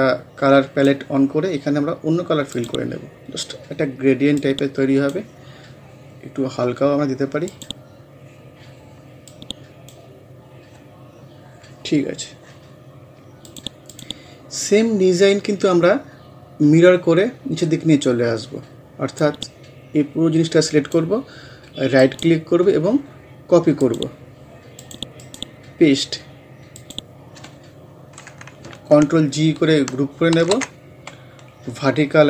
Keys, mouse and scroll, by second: 10.4 scroll down 1, 13.5 click, 14.9 scroll up 1, 19.2-22.0 drag, 22.0 right click, 23.9 click, 25.2 right click, 26.8 click, 30.4 ctrl+g.